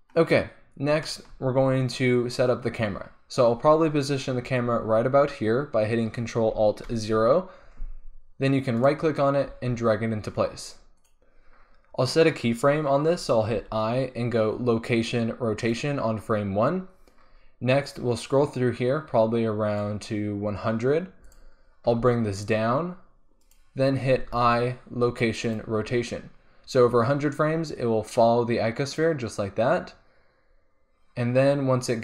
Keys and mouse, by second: 3.0-6.8 middle drag, 6.8 ctrl+alt+KP_0, 9.5 g, 9.9 click, 10.3 click, 10.4 click, 11.1-13.0 drag, 13.5 i, 17.9-19.7 drag, 21.3-22.3 drag, 21.9 g, 22.7 click, 23.0 click, 23.5-25.4 drag, 24.3 i, 27.7 click, 27.8 middle click, 27.8 click, 28.0 middle click, 28.0 click, 28.1-28.7 middle drag, 28.8 middle click, 29.0 middle click, 29.0-29.5 drag.